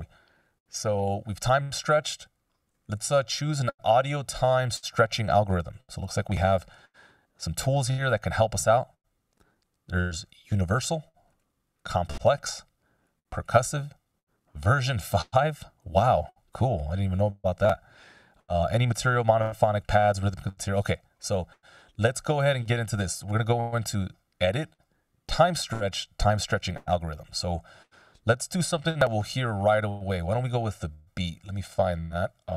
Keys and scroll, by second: 0.6 f, 22.0 F16.